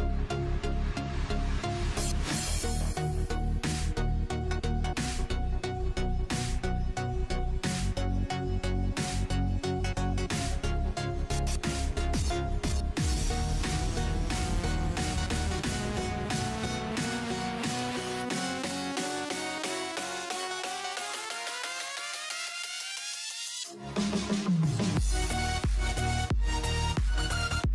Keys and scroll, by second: 0.0-0.2 typing, 16.2-19.3 typing, 23.5-24.6 typing, 26.2-27.0 typing.